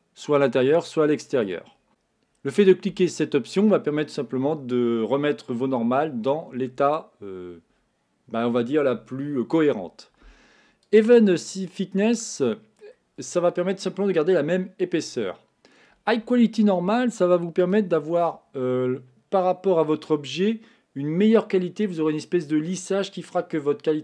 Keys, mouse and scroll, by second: 1.9 Tab, 11.0 click, 11.8-14.8 middle drag, 17.7-20.6 drag.